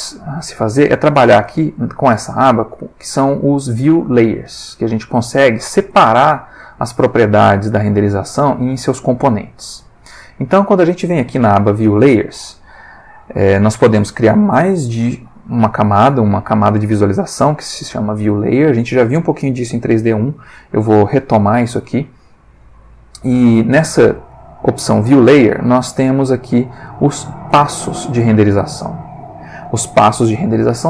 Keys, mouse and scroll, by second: 4.9 click, 8.4-10.7 drag, 27.4 click, 28.4 click.